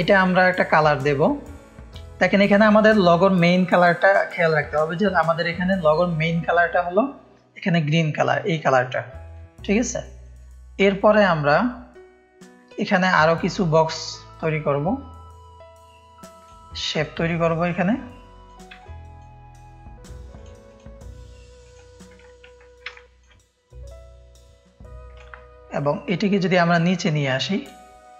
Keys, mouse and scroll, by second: 0.1-1.3 drag, 1.0 space, 1.6 drag, 2.2 click, 4.8-11.1 drag, 11.1 space, 11.3 click, 13.1-16.4 drag, 17.0 ctrl+space, 17.0-18.4 ctrl+drag, 18.7 space, 18.8 click, 20.3 click, 21.6 click, 22.2 space, 22.9 ctrl+space, 22.9 ctrl+click, 25.1-27.6 alt+shift+drag.